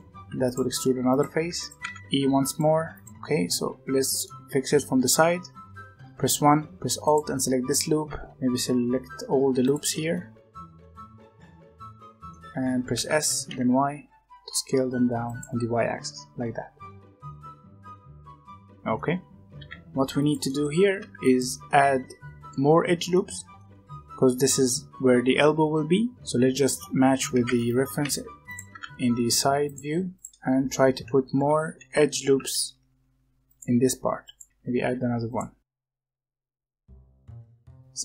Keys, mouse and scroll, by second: 0.0-2.7 typing, 3.1-4.7 middle drag, 4.7 z, 5.5 1, 6.5 z, 7.0 alt+click, 7.8 s, 9.5 alt+shift+click, 10.1 middle click, 10.9 alt+shift+click, 11.2 alt+shift+click, 11.3 middle click, 11.8 alt+shift+click, 12.0 middle click, 12.8 s, 15.4-17.3 middle drag, 17.3 alt+click, 17.6-18.1 scroll up 2, 18.1 middle click, 19.0-19.5 scroll up 1, 19.5 s, 20.4 middle click, 20.8 g, 21.4-23.2 middle drag, 23.5-25.0 middle drag, 25.3 middle click, 26.2 z, 27.2 g, 28.6 s, 30.1 alt+click, 30.3 g, 31.3 g, 32.5 ctrl+r, 34.7 ctrl+r, 35.9-38.0 typing, 36.4 alt+click, 37.3 alt+a.